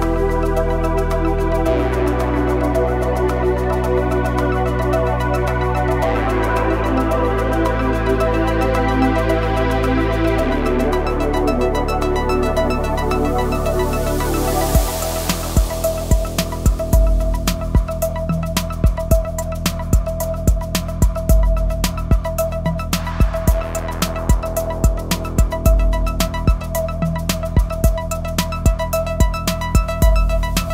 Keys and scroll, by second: 0.3 y, 4.6 g, 4.9 y, 10.0 g, 15.7 ctrl+r, 20.3 s, 20.6 y, 21.0 KP_0, 21.5 Return, 29.2 |.